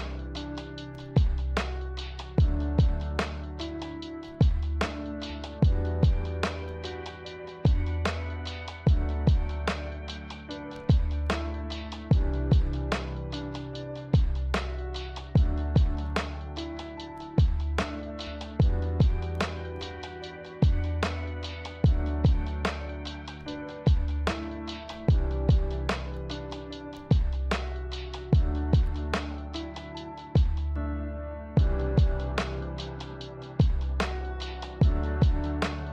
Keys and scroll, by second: 12.5 g, 15.2 z, 24.7 g, 27.9 z.